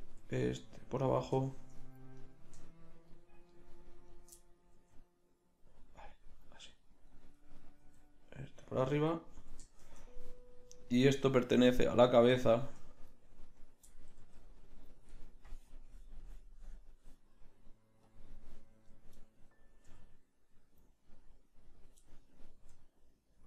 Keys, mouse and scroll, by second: 0.3 g, 2.1-4.7 drag, 4.7 g, 7.1 right click, 7.9 g, 10.3 click, 14.2 g, 18.1 click, 19.2 middle click, 19.9 g, 22.6 g.